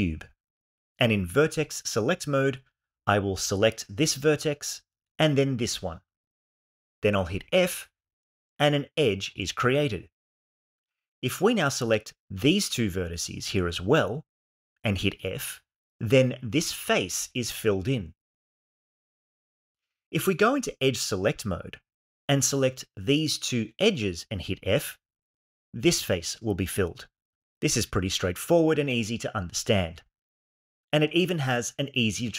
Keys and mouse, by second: 1.7 1, 4.0 click, 5.5 shift+click, 7.7 f, 11.6 shift+click, 12.7 shift+click, 16.0 f, 20.3 2, 21.9 click, 23.1 shift+click, 24.6 f.